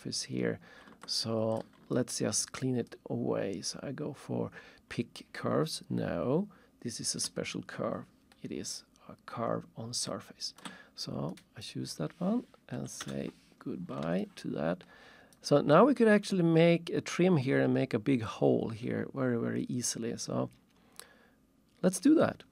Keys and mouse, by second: 1.1 alt+shift+click, 1.6 alt+shift+click, 1.9 ctrl+shift+click, 2.9 ctrl+shift+click, 11.7 click, 12.7 Delete, 13.0 Return, 14.2 alt+shift+click.